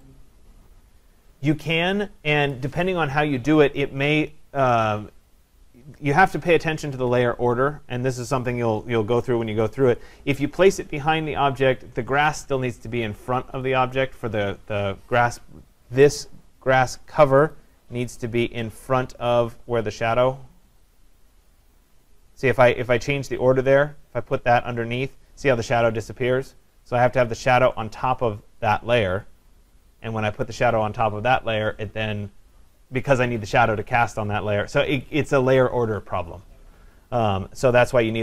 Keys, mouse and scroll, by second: 17.6 click, 21.5 click, 24.9-26.6 drag, 28.6-33.6 drag.